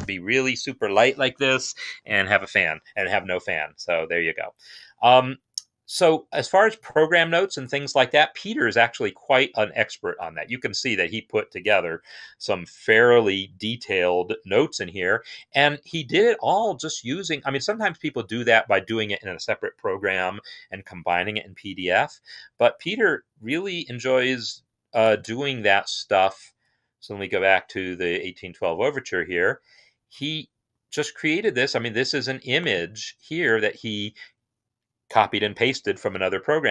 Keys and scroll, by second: 26.7 Home.